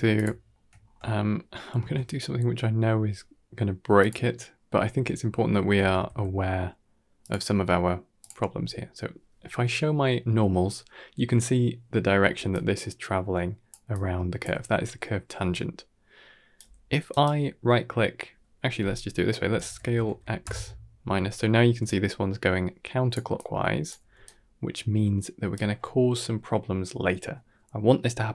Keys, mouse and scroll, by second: 0.2 shift+middle click, 0.6-0.9 scroll up 3, 0.9 shift+middle click, 1.5 shift+middle click, 4.5 click, 5.7 Tab, 5.9 a, 7.1 click, 12.2 d, 12.4 click, 13.6-15.2 typing, 13.8 click, 15.4 right click, 16.4 d, 17.0 right click, 19.3 s, 21.6 d, 21.7 click, 23.0-24.0 typing, 23.2 click, 24.1 right click.